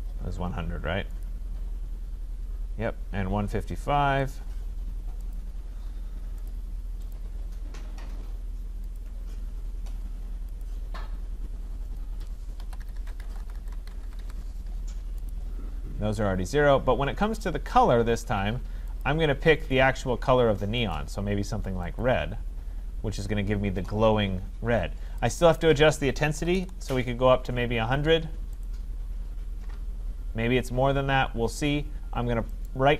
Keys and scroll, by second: 13.0 Tab, 27.4 Tab.